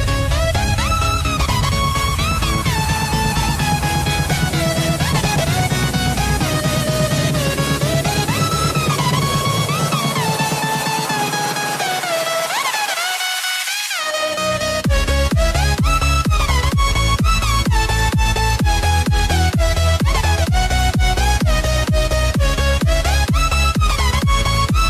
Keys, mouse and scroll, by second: 3.6 scroll down 1, 5.4 click, 11.4 click.